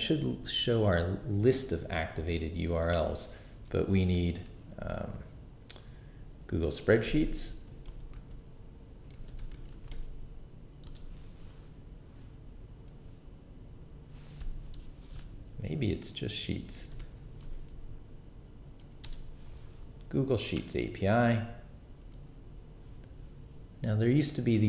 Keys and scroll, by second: 6.6-10.4 typing, 10.8 Return, 15.1 BackSpace, 16.5-18.8 typing, 19.0 Return.